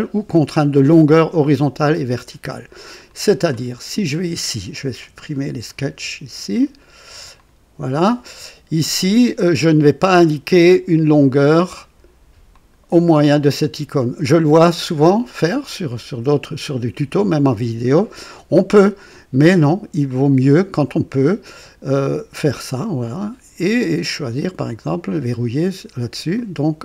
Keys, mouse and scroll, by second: 3.1 click, 4.9 Delete, 5.6 click, 5.9 Delete, 6.6 click, 7.2 click, 11.1 click, 12.5 click, 20.0 click, 23.0 click, 24.6 click, 26.3-26.8 drag.